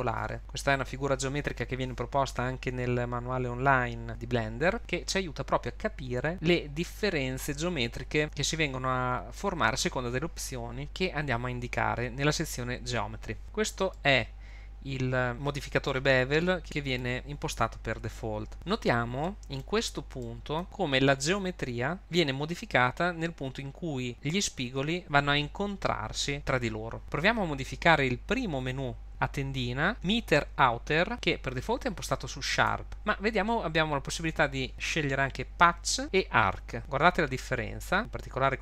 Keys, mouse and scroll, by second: 13.4 click, 13.9 middle click, 16.6 middle click, 18.5 middle click, 18.5-19.1 scroll up 4, 19.2 middle click, 32.5 click.